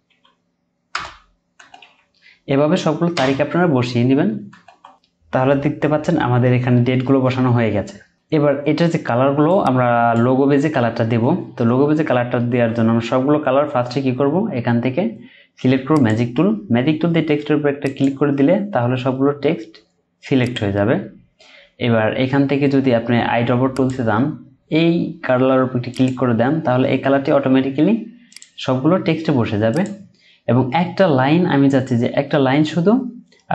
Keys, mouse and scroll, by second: 0.0-0.1 typing, 0.9 Return, 1.6 typing, 3.1 Return, 4.5-5.5 typing, 6.0-6.9 scroll down 1, 6.9 typing, 8.1-10.9 scroll up 1, 11.7-12.1 alt+scroll up 1, 12.4-14.2 alt+scroll down 1, 19.8-20.7 alt+scroll up 1, 20.7 alt+scroll up 1, 20.9-21.4 alt+scroll down 1, 21.5-23.7 scroll up 1, 28.9-30.1 scroll down 1.